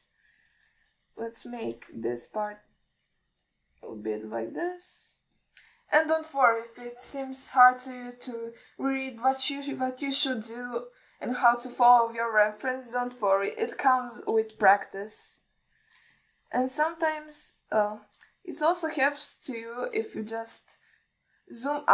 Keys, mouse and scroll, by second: 1.7-3.0 shift+drag, 3.2-3.7 middle drag, 4.0 click, 4.9 alt+middle click, 5.4 click, 5.9 middle click, 6.7 click, 7.3 alt+middle drag, 7.9 alt+shift+middle drag, 8.5-9.4 middle drag, 10.2 click, 13.0-14.0 middle drag, 14.4 KP_1, 16.1-17.0 drag, 17.4-19.3 shift+drag, 20.1 ctrl+middle click, 21.5 ctrl+alt+middle click.